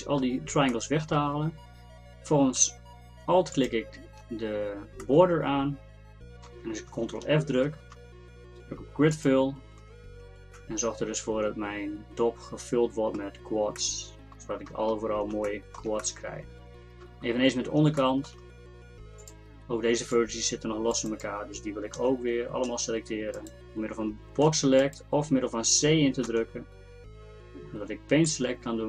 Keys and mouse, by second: 3.4-5.5 middle drag, 7.7 ctrl+f, 19.3 middle click, 20.2 click, 22.0 z, 22.7 c, 24.5 b, 26.3 c.